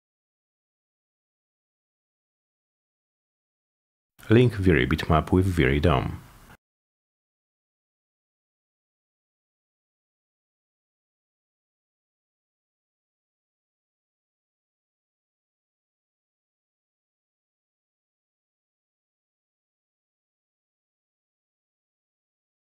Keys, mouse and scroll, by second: 0.6 click, 1.3 click, 3.5 click, 4.3 click, 5.9-7.3 drag, 8.4 click, 10.8 click, 11.4 click, 13.1 click, 14.3 click, 20.1 click, 20.6 click, 21.2 click, 21.5 click, 22.0 click.